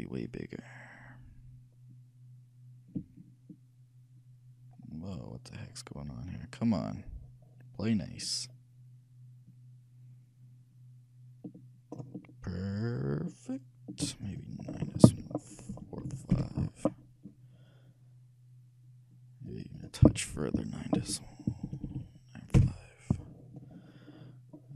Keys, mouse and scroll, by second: 14.4-16.1 drag, 19.6-21.2 drag, 21.9 BackSpace, 23.9 middle click.